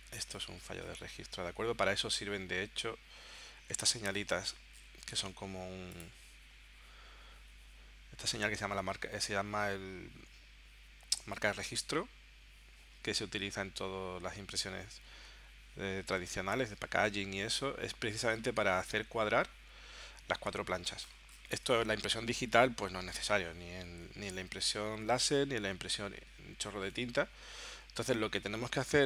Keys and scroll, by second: 26.9 super+Tab.